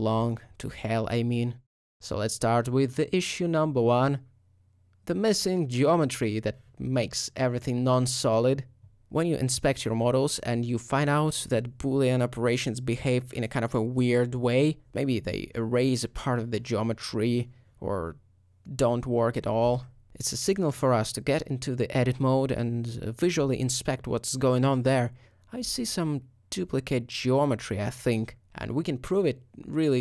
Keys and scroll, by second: 6.8 alt+g, 7.1 alt+z, 18.0 shift+h, 20.5 Tab, 20.5 alt+a, 25.8 2, 26.2 g.